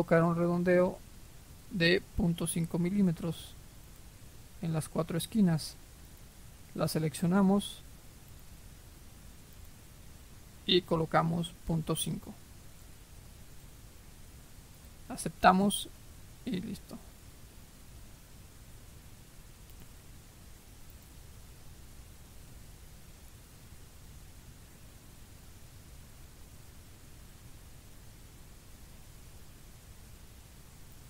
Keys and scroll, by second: 12.1-12.4 typing.